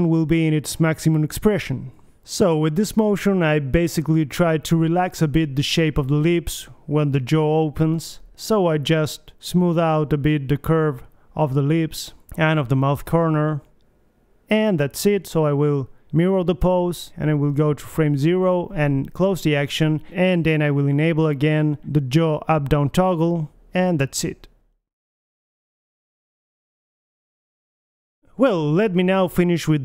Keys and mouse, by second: 0.1 Right, 0.3 Right, 1.6 Left, 2.1 right click, 2.5 g, 3.3 click, 4.0 click, 4.1 g, 4.7 click, 5.2 g, 5.9 KP_1, 6.2 g, 7.8 click, 8.1 KP_3, 8.8-10.8 drag, 10.1 KP_3, 10.4 g, 11.8 middle click, 12.2 alt+g, 14.0 click, 14.4-15.9 middle drag, 16.4-18.2 middle drag, 16.8 KP_3, 18.4 Right, 19.3-21.5 drag, 20.2 alt+r, 22.4 middle click, 22.9 click, 24.0 r, 27.2 middle click, 28.3-29.8 middle drag, 29.2 alt+g, 29.4 alt+r, 29.6 KP_1.